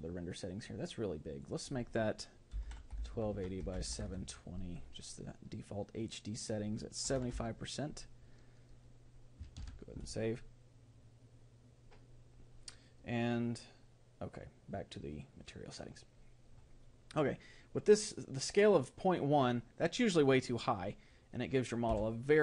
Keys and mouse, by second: 8.8-10.2 drag, 10.2 ctrl+s.